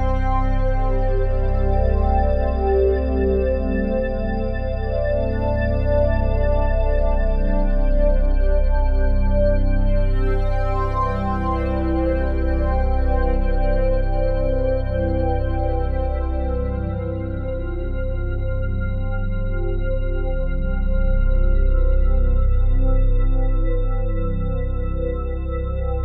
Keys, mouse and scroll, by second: 1.5 click, 3.0 click, 4.1 click, 7.7 click, 10.4-11.2 ctrl+alt+drag, 15.1 click, 19.3 click, 20.9 Return, 23.9 click, 25.0 1, 25.4 Return.